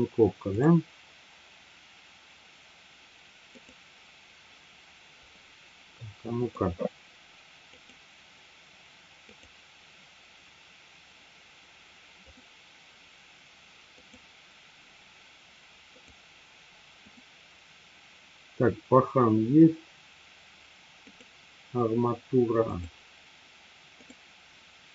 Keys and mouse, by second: 3.4 click, 6.1 middle click, 7.7 click, 9.2 click, 12.2 click, 13.9 click, 16.0 click, 21.0 click, 24.0 click.